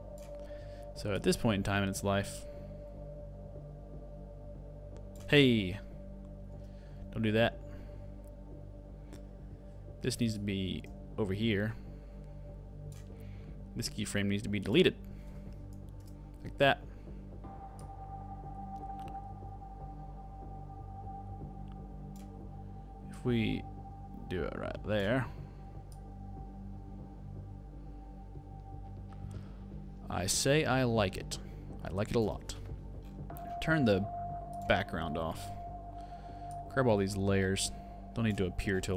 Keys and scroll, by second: 6.9 super+z, 8.1 super+z.